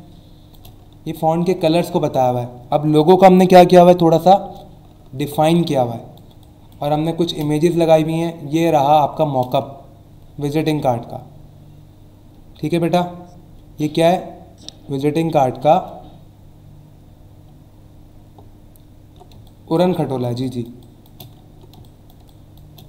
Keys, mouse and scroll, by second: 0.2 space, 0.8 scroll down 1, 1.9 alt+scroll up 1, 5.6 space, 5.7 click, 6.1 space, 6.4 click, 6.5 space, 6.9 click, 7.1 space, 7.7-8.4 scroll up 3, 8.7 space, 8.8 click, 9.2 space, 17.6 alt+scroll down 1, 18.5 alt+scroll down 1, 19.3-22.3 typing, 19.4 click, 20.0 click, 20.4 click, 20.8 click, 21.4 alt+scroll up 1, 21.8 click.